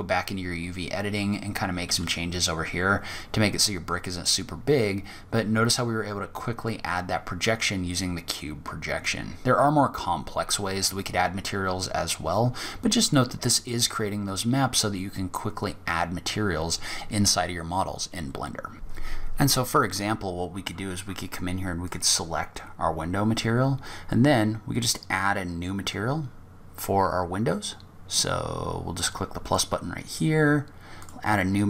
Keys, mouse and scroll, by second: 0.0-1.1 scroll down 4, 1.1 s, 8.4-9.4 scroll up 5, 9.4-10.1 scroll down 2, 10.1 scroll down 2, 10.6-12.0 scroll down 2, 12.2 click, 12.9-13.7 scroll up 7, 14.3-14.8 scroll down 7, 14.8-15.2 scroll up 2, 17.6 scroll down 2, 18.0-18.7 scroll up 1.